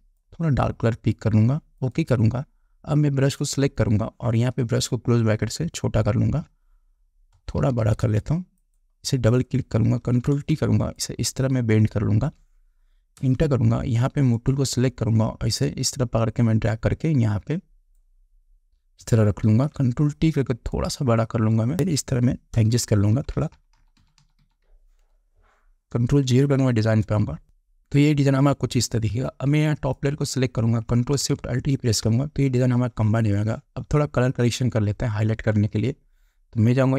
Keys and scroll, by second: 5.2 [, 7.8 ], 10.5 ctrl+t, 13.7 Return, 19.9 ctrl+t, 23.0 Return, 23.4 Up, 27.2 ctrl+0, 32.2 ctrl+alt+shift+e.